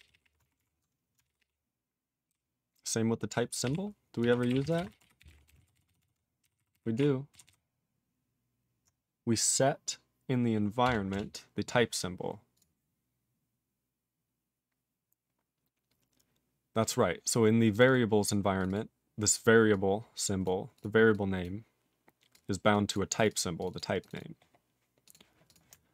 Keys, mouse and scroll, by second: 0.0 ctrl+p, 0.2 ctrl+p, 0.2 ctrl+p, 0.4 alt+f, 0.6 alt+f, 4.2-6.0 typing, 6.0 ctrl+s, 6.4 ctrl+r, 6.6 ctrl+r, 7.0 ctrl+r, 7.3 ctrl+s, 7.5 ctrl+s, 11.1 Return, 12.0-12.5 scroll up 3, 12.5 click, 12.6 click, 13.3-14.2 scroll up 3, 14.2-15.2 scroll up 2, 15.2-16.5 scroll up 2, 17.7 click, 17.8 click, 17.9 double click, 17.9 double click, 18.6 click, 18.7 double click, 18.7 double click, 19.7 click, 20.4 click, 20.7 click, 20.8 click, 21.1 click, 21.4 click, 22.3 click, 22.7 click, 22.9 click, 22.9 click, 23.2 click, 23.2 click, 23.3 double click, 23.4 double click, 23.6 click, 23.6 click, 23.7 double click, 23.8 double click, 24.0 click, 24.1 click, 24.1 double click, 24.2 double click, 25.0 click, 25.1 click, 25.5 click, 25.5 click.